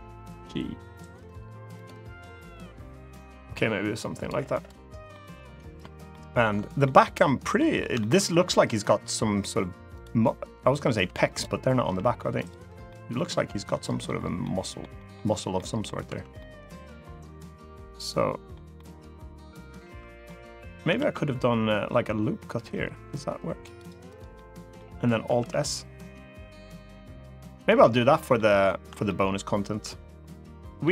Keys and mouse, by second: 0.0 g, 1.5 click, 3.2 g, 3.9 click, 4.3 click, 4.8 middle click, 5.8 middle click, 6.6 middle click, 7.3 middle click, 7.7 shift+middle click, 9.7 click, 10.8 1, 11.0 click, 11.6 g, 12.1 click, 12.6-13.8 middle drag, 14.1 middle click, 14.7 middle click, 15.3 middle click, 15.8 2, 16.1-18.3 middle drag, 18.5-20.0 middle drag, 20.7 ctrl+r, 23.8 right click, 24.1 middle click, 25.1 alt+s, 27.4 click, 27.7 middle click, 28.4 shift+middle click, 28.8-30.5 middle drag.